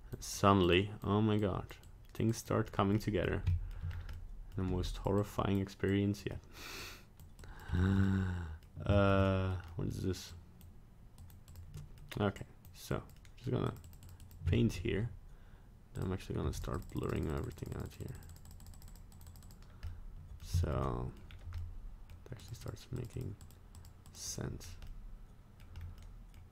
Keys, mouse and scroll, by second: 0.4 click, 0.7 click, 1.4 click, 1.9 click, 2.4 click, 2.7 scroll down 1, 3.0 middle click, 3.5 shift+middle click, 3.9 scroll up 1, 4.1 middle click, 4.6 f, 5.2 click, 6.0 click, 6.3 middle click, 6.8 click, 7.4 click, 7.8 shift+middle click, 8.1 middle click, 8.9 shift+middle click, 9.2 middle click, 9.7 middle click, 9.7 shift+middle click, 10.3 click, 11.2 click, 11.5 click, 11.8 middle click, 12.4 click, 12.9 click, 13.2 middle click, 13.7 click, 14.0 click, 14.1 click, 14.2 click, 14.6 shift+middle click, 15.9 click, 16.4 f, 16.8 click, 17.0 click, 17.1 click, 17.4 click, 17.6 click, 17.6 click, 17.9 click, 18.2 click, 18.5 click, 18.6 click, 18.8 click, 18.9 click, 19.1 click, 19.3 click, 19.4 click, 19.9 middle click, 20.6 shift+middle click, 20.8 middle click, 21.3 scroll down 1, 21.6 middle click, 22.4 click, 22.6 click, 23.0 click, 23.2 click, 23.4 click, 23.8 click, 24.1 click, 24.3 click, 24.6 scroll down 1, 24.9 middle click, 25.8 scroll up 1, 26.0 middle click.